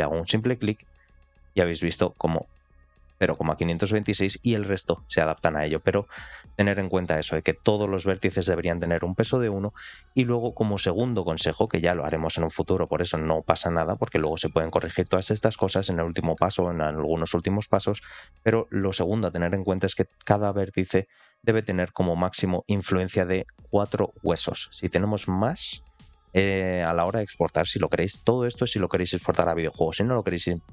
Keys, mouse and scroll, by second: 0.6 click, 0.9 click, 20.9 ctrl+click, 22.1 ctrl+click, 25.4 ctrl+click, 26.1 shift+middle click.